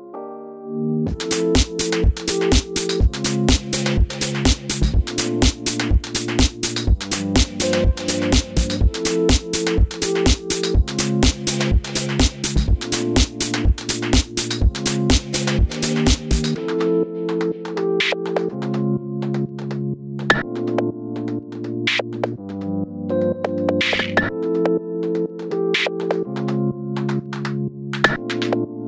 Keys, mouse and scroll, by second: 0.4-1.7 drag, 1.7-8.4 middle drag, 2.0 Tab, 3.0-7.0 scroll down 2, 7.4-8.0 scroll up 2, 8.4 shift+right click, 9.2 shift+a, 10.1 KP_Enter, 10.1 click, 10.3 scroll down 2, 10.5-12.4 middle drag, 10.6 scroll up 2, 10.7 Tab, 11.2 r, 12.4 s, 12.5 click, 12.7 scroll up 1, 13.7 s, 13.7-14.2 drag, 14.2 g, 14.9-15.4 drag, 15.4 g, 16.1 click, 16.5-17.7 middle drag, 17.2 g, 17.7 click, 17.7 middle click, 17.9 a, 18.7 s, 18.7 click, 18.8 middle click, 19.0 click, 19.3 i, 21.1-22.2 middle drag, 22.2 e, 22.2 click, 24.2 a, 24.4 KP_3, 25.2 z, 25.4 scroll up 2, 25.5-28.5 shift+middle drag, 26.9 scroll down 2, 27.1 Tab, 27.6 z, 28.6 click.